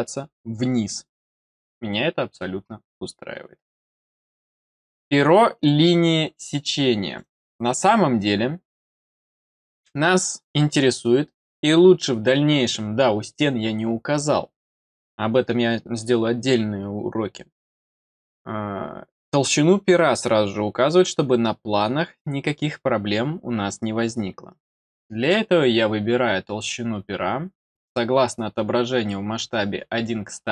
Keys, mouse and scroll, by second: 5.5 click, 6.4 click, 7.0 click, 7.2 click, 8.1 click.